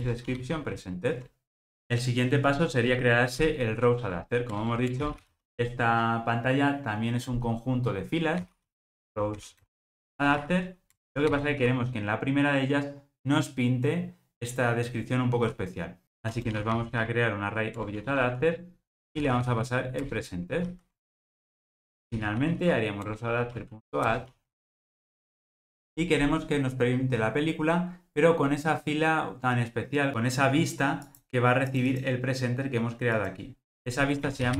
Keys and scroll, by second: 0.1 Return, 11.1 Return, 17.8 Return, 23.0 Return.